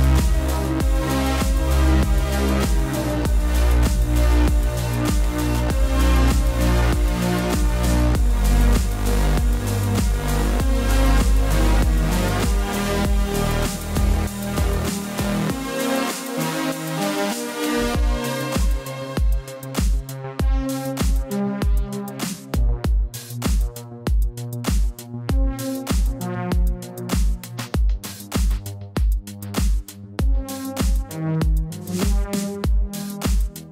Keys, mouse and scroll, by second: 0.9 click, 9.0 click, 15.6 click, 17.8-18.1 typing, 18.8 click, 26.5 typing, 27.6 typing, 28.4 click, 30.1 right click, 32.6 click.